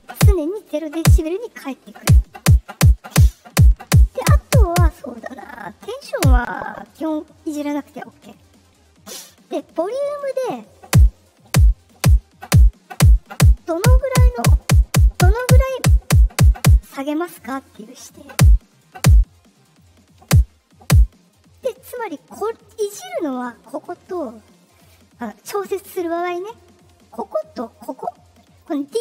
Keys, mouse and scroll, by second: 9.7-12.3 drag, 17.6 click, 19.7-21.5 drag, 24.6-25.8 drag, 26.5 click, 27.7 click.